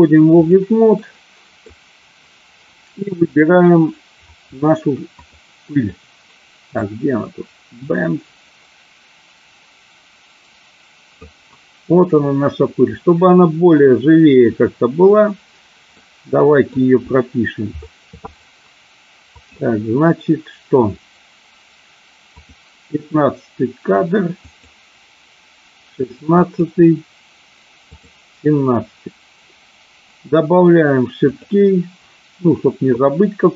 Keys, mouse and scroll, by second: 1.2 middle click, 3.2 click, 5.2 click, 6.9-11.5 drag, 15.8-16.6 middle drag, 19.4 click, 22.4 click, 24.5 click, 26.5 click, 27.8 click, 31.2 click.